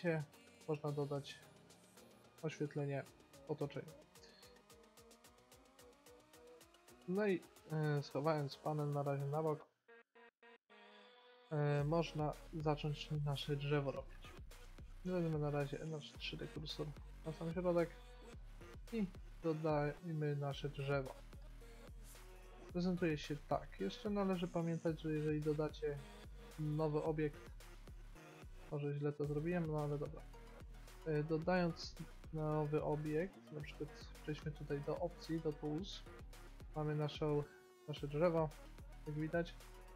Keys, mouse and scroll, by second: 1.8 middle click, 1.9-3.8 drag, 4.7-7.1 middle drag, 7.4-9.1 drag, 9.5-11.3 drag, 11.3 middle click, 14.2 shift+s, 19.6 shift+a, 24.2 shift+a, 28.6-29.7 drag, 29.7 middle click, 30.1 x, 30.5 click, 31.6 shift+a, 34.4 t, 35.8-37.1 drag, 37.4 click, 37.6 click, 37.9 click.